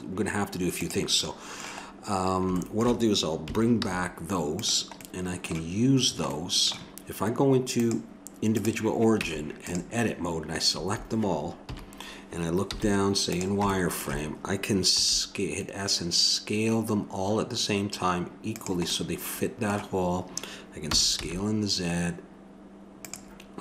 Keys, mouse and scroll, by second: 0.8-2.6 drag, 2.6 middle click, 3.8 alt+h, 5.0-6.5 drag, 7.8-9.3 drag, 9.2 Tab, 10.7 a, 11.6 KP_7, 12.7 z, 13.7 scroll up 1, 15.0 s, 19.0 middle click, 20.9 s.